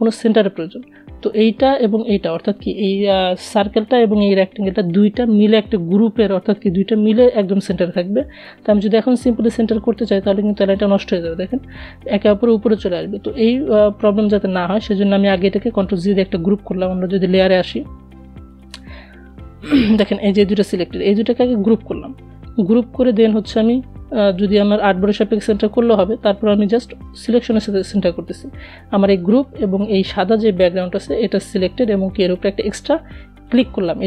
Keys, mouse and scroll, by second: 11.8 ctrl+z, 12.6 ctrl+z, 16.9 click, 19.8 ctrl+g, 25.8 shift+click.